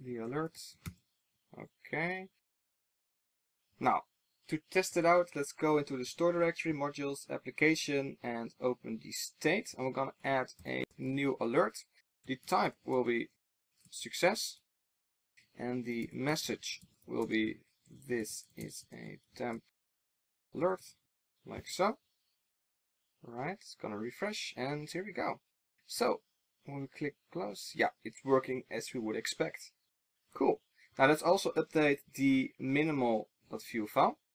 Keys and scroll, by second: 1.1 alt+super+l, 3.0 super+s.